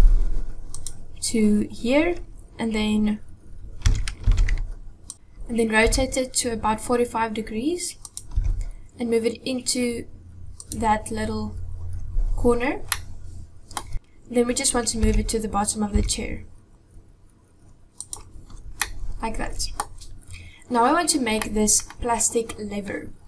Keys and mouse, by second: 3.9 s, 5.1 ctrl+z, 5.7 r, 8.3 g, 12.9-13.8 middle drag, 13.9 KP_7, 13.9 g, 15.8 g, 18.8-19.1 middle drag, 19.4 middle click, 21.4 middle click.